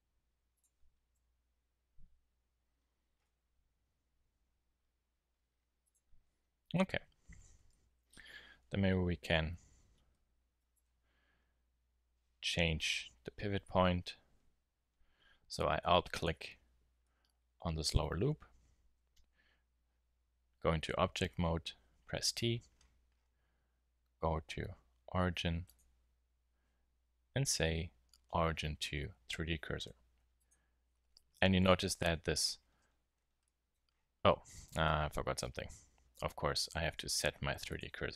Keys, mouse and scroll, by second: 1.1 Tab, 7.8 t, 7.9 KP_1, 10.7 Tab, 12.7 z, 17.2 middle click, 18.0 z, 18.8 Tab, 21.2 t, 32.0 KP_1, 32.6 z, 36.2 Tab, 36.8 shift+s.